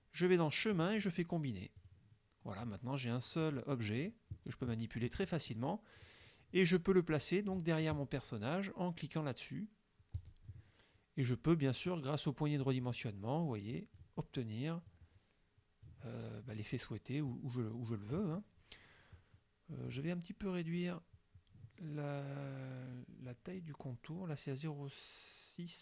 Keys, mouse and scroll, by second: 0.8 click, 1.9 click, 2.7 click, 3.5 click, 4.0-5.7 drag, 5.3 right click, 6.1-7.8 drag, 10.2 click, 11.9-13.1 drag, 13.8 click, 15.0-16.1 drag, 16.8-18.4 drag, 19.9 click.